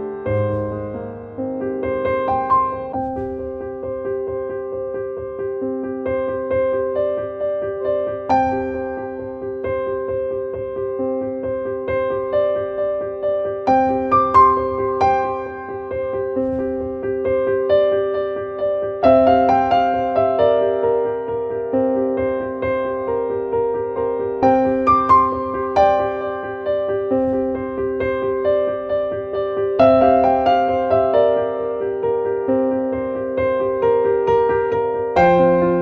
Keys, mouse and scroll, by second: 4.5 click, 5.6-10.2 drag, 11.4-12.8 drag, 14.1 click, 15.3 click, 17.9 click, 20.3-22.9 drag, 27.3 click, 31.1-35.8 drag.